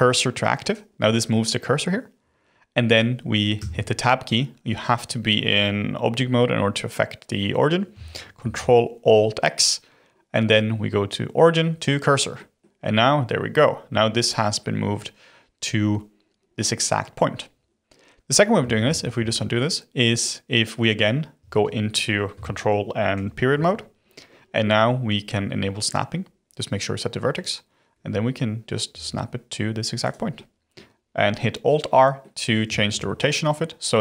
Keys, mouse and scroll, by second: 3.5 Tab, 8.3 ctrl+alt+x, 12.3-15.3 middle drag, 18.8 ctrl+z, 19.2 ctrl+z, 21.3 Tab, 23.1 ctrl+., 25.8-28.8 drag, 28.9 g, 30.3-34.0 middle drag.